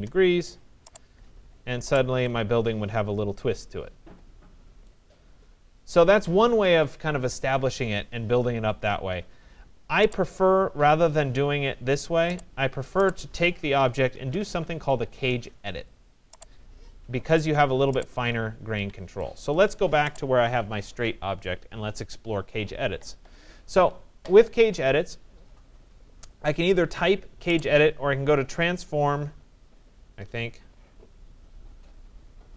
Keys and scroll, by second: 14.7 Return, 18.3 Escape.